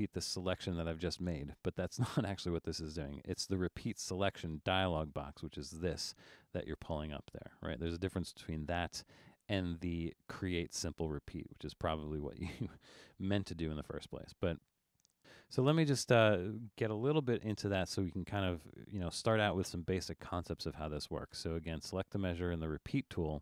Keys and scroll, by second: 13.2 super+z, 21.3 Return.